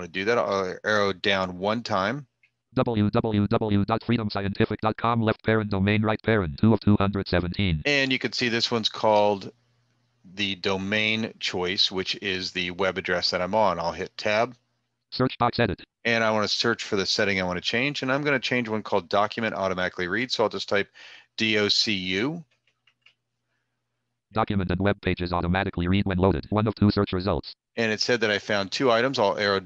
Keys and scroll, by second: 13.4 Tab.